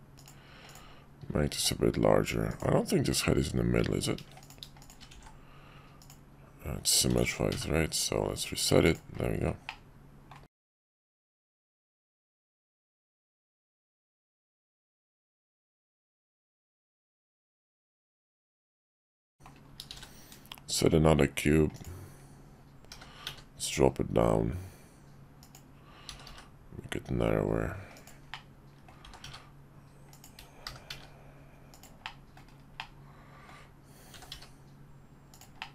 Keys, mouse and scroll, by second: 0.6 click, 1.5 s, 4.4 click, 4.8 shift+click, 5.1 alt+x, 6.0 click, 8.3 click, 8.8 click, 9.7-10.4 middle drag, 10.6 shift+middle click, 11.0-14.5 middle drag, 15.2 `, 17.3-19.4 middle drag, 19.9 shift+a, 22.9 g, 26.1 s, 28.4 middle click, 29.0 s, 30.6 g, 32.2 click, 32.9 middle click, 34.1 s.